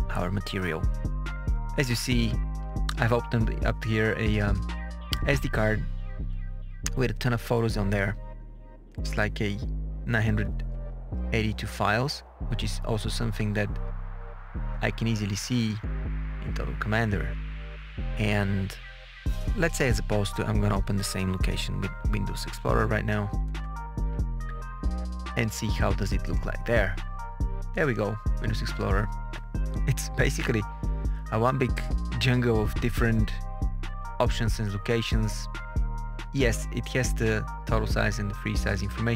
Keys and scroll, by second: 6.2 Page_Down, 23.6 super+e.